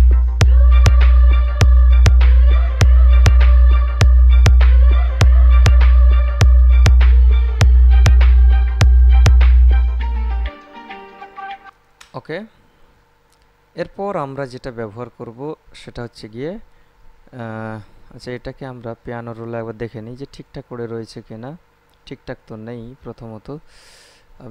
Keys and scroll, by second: 11.9 space.